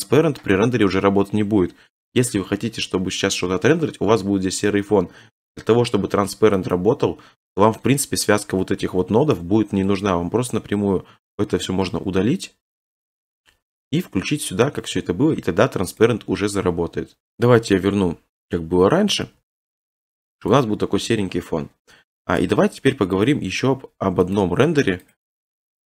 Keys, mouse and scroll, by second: 0.0 click, 6.7 click, 9.3 click, 11.8 x, 14.0 click, 16.0 click, 17.5 click, 17.8 ctrl+z, 18.4 ctrl+z, 18.8 ctrl+z, 19.2 ctrl+z, 20.5 click, 23.2 click, 24.4 click, 25.1 click, 25.6 click.